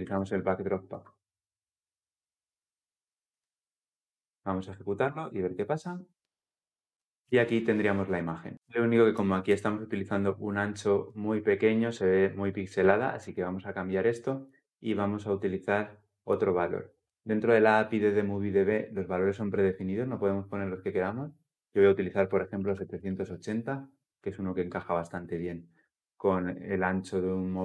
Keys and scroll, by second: 0.6 Return, 6.1 shift+F10, 25.2 ctrl+F10.